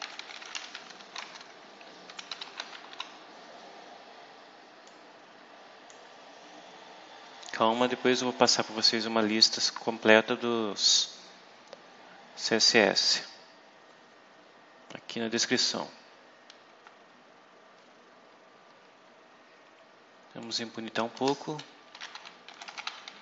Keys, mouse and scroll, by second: 0.0-3.2 typing, 4.8-6.0 drag, 6.2-7.2 scroll down 4, 8.6 scroll up 2, 13.5-14.2 scroll down 4, 14.4-14.9 scroll up 4, 15.8-16.2 scroll down 2, 18.8-19.2 scroll up 2, 20.3 click, 21.0 Return, 21.6-23.2 typing.